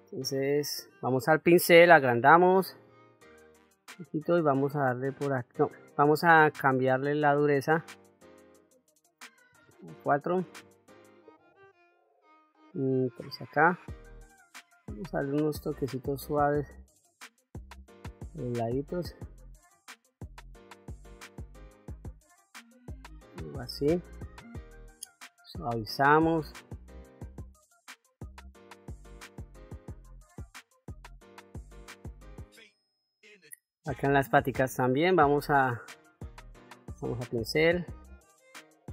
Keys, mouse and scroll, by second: 1.5 f, 3.5 middle click, 4.8 click, 6.3-9.3 shift+f, 10.0 ctrl+z, 11.3 shift+f, 13.0 shift+f, 13.3 middle click, 14.5 click, 15.5 click, 16.3 click, 17.2 click, 18.5 click, 19.5 middle click, 21.2 click, 22.1 click, 23.0 middle click, 25.1 click, 26.4 click, 27.3-29.4 drag, 30.6 middle click, 31.1-32.4 drag, 32.4 middle click, 33.0 shift+middle click, 33.5 middle click, 34.1 ctrl+middle click, 36.1 click, 37.6 f.